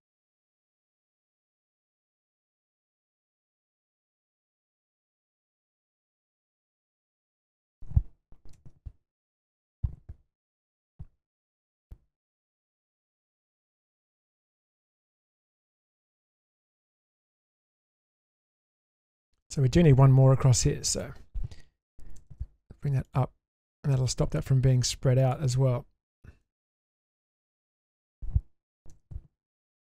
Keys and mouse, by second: 7.0 click, 8.5 ctrl+x, 19.4 middle click, 20.3 1, 22.2 g, 23.6 click, 23.9 g, 26.4 middle click, 28.0 click, 28.9 g.